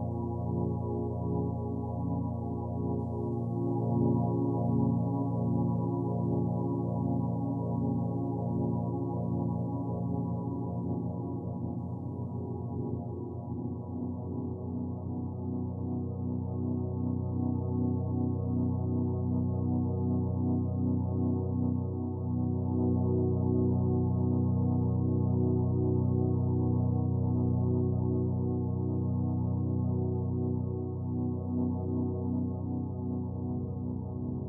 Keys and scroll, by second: 18.7 ctrl+g.